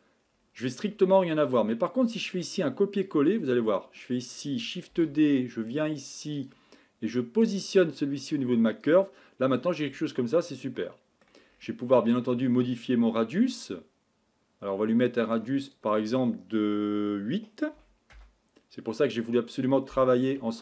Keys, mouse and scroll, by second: 0.2-3.1 scroll down 5, 3.1-4.1 drag, 4.9 shift+d, 7.4-8.8 drag, 9.4-9.8 scroll down 3, 9.8-12.9 scroll up 7, 12.9-20.6 drag.